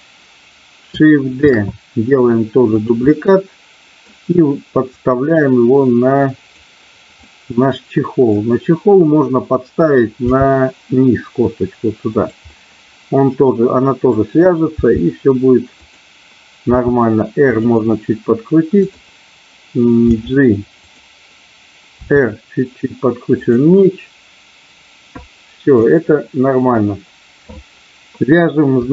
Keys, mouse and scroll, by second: 1.4 shift+d, 2.7 click, 3.0-4.0 middle drag, 4.9-6.5 drag, 7.2-8.2 middle drag, 10.2 g, 12.0 click, 12.5-14.1 middle drag, 14.7 g, 15.7 click, 16.6 r, 18.7 click, 20.0 g, 20.7 click, 22.0 r, 23.2 click, 23.7-25.9 middle drag.